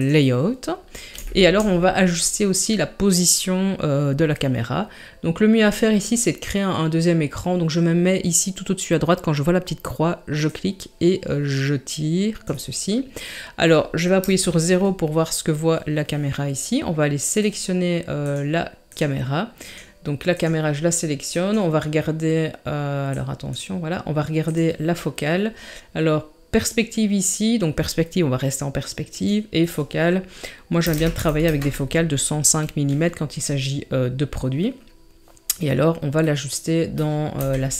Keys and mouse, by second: 1.2 shift+middle drag, 10.4-12.4 drag, 14.2 KP_0, 17.4 click, 18.2 click, 18.9 click, 24.5 click, 29.1-31.4 drag, 36.2 middle click, 37.4 KP_3.